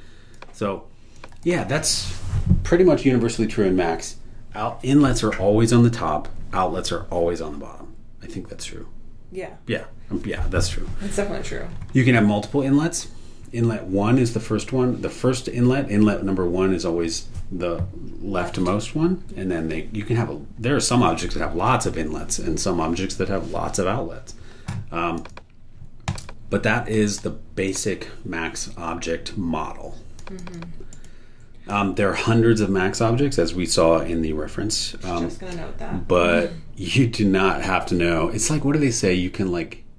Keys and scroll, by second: 30.9 super+e.